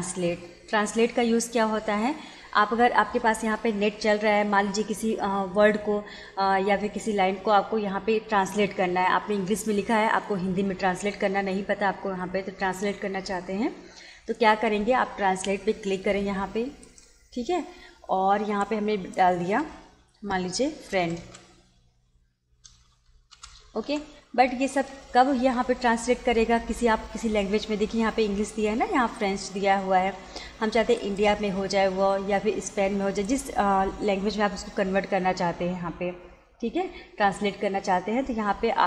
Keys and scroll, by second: 21.0 shift+f, 21.3 r, 22.7 i, 23.0 e, 23.4 n, 23.9 d.